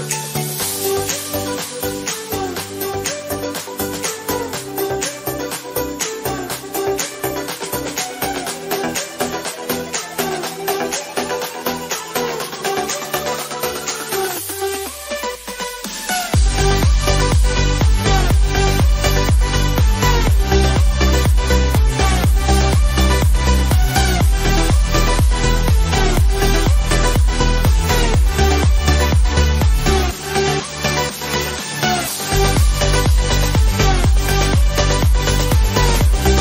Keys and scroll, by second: 24.6 ctrl+z.